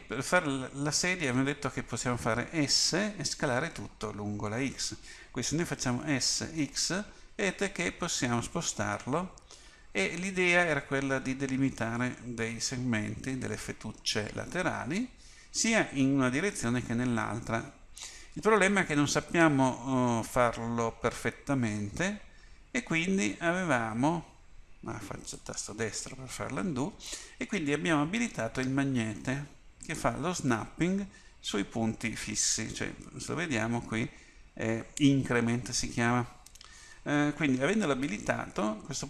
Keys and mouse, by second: 6.1 s, 29.9-39.0 drag.